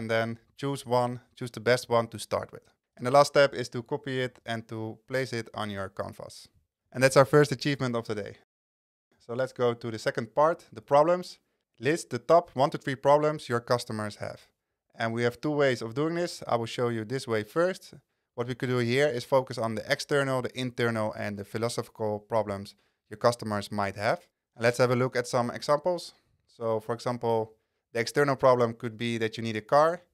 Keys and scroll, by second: 3.0 super+c, 4.4 super+v, 24.9 Down.